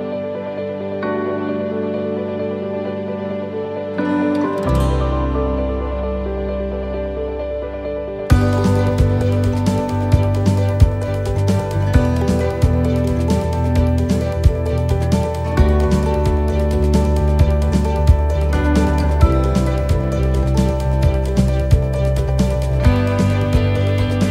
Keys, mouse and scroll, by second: 0.5 shift+middle click, 1.4 shift+middle click, 2.4 shift+middle click, 3.7 click, 5.5 right click, 8.2 shift+d, 9.2 click, 10.0 shift+middle click, 10.6 scroll down 1, 11.2-11.6 scroll down 4, 11.8 click, 12.6 shift+middle click, 13.9 click, 15.2 shift+middle click, 15.7-16.5 scroll up 9, 16.5 shift+middle click, 17.3 scroll up 2, 17.8 shift+middle click, 18.9 click, 20.6 middle click.